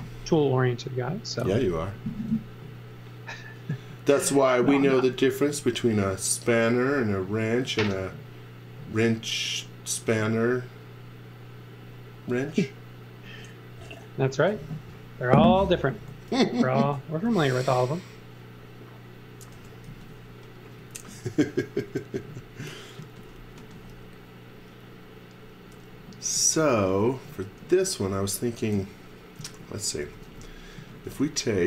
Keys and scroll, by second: 0.3 x, 17.3 space, 18.3 space, 19.5 g, 19.9 z, 20.8 x, 21.8 x, 22.2 m, 23.0 z, 23.6 x, 25.9 x, 26.7 v, 28.7-31.6 typing.